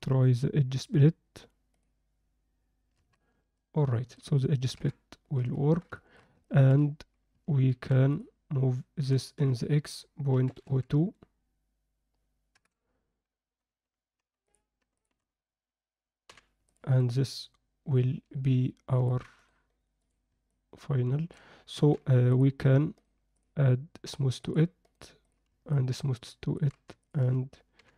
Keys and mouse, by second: 0.0-2.4 drag, 3.1-3.8 middle drag, 3.8-4.2 alt+drag, 4.8 KP_7, 5.5 ctrl+click, 6.0 alt+shift+middle click, 6.4 ctrl+middle click, 7.7 alt+h, 9.0 g, 16.3 h, 17.0-17.9 middle drag, 17.9 alt+drag, 18.0-19.1 alt+middle drag, 19.4-20.6 right drag, 20.6-21.3 alt+middle drag, 21.8 alt+h, 23.0-24.1 right drag, 24.4 click, 25.0-25.9 right drag, 25.9-26.6 alt+middle drag, 27.0 shift+click, 27.8 h.